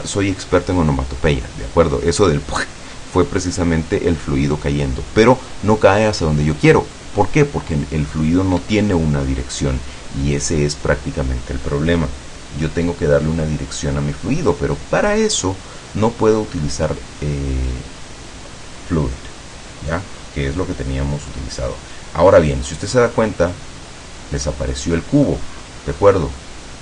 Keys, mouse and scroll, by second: 8.6 Escape, 20.2-20.6 scroll up 2, 21.3 scroll down 2, 22.2-22.5 scroll down 2, 22.8-23.5 scroll down 2, 23.6-25.6 middle drag, 26.4-26.8 middle drag.